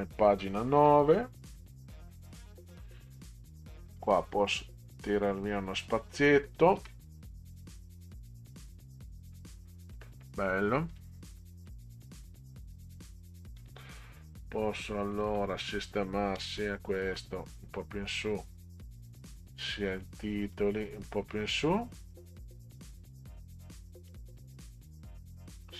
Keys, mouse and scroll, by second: 0.7 9, 1.5 Delete, 3.5 click, 6.5 click, 6.7 Delete, 10.9 click, 11.4 middle drag, 13.6 click, 15.1 click, 15.7 click, 17.1 Up, 17.5 Up, 17.7 Up, 19.4 click, 20.4 click, 20.9 Up, 21.1 Up, 21.3 Up, 25.5 click.